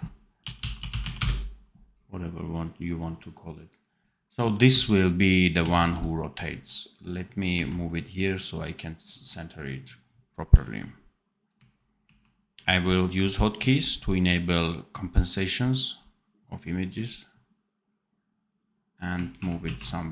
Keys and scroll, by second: 4.6 c, 5.7 ctrl+z, 7.4 v, 10.4 v, 11.9 shift+q, 13.5 shift+a, 19.3 shift+q, 19.5 shift+a.